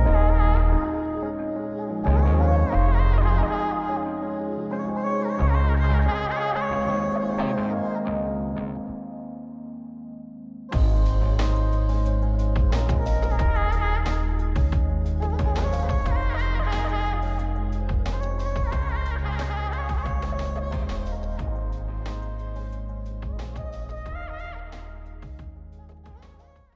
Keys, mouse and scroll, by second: 1.1 click, 2.2 middle click, 3.3-4.3 drag, 5.1-6.1 drag, 7.3-10.2 scroll down 1, 10.5-15.2 middle drag, 15.8 middle click, 16.6 click, 16.6 scroll down 1, 18.2-19.8 drag, 20.3-21.0 drag, 22.0-24.3 middle drag, 25.0 click.